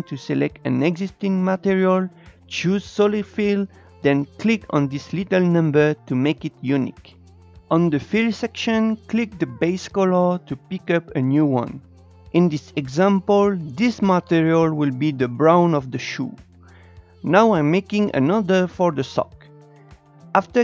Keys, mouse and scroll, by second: 6.4-10.2 drag, 13.4-15.7 drag, 17.8-20.6 drag.